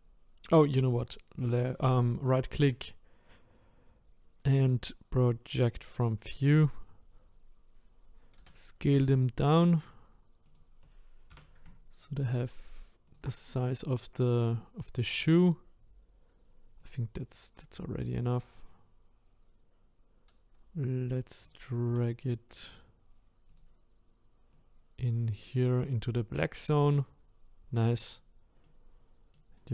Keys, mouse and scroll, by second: 6.4-9.1 right drag, 13.8 click, 16.9 click, 24.6 click, 28.0 click, 28.6 middle click, 29.5-29.7 scroll down 3.